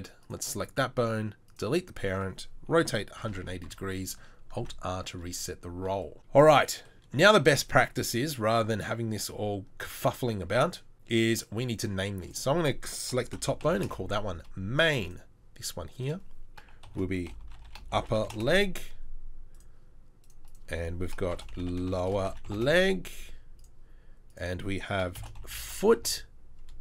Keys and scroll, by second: 2.7 r, 4.6 alt+r, 17.5 p, 25.5 o.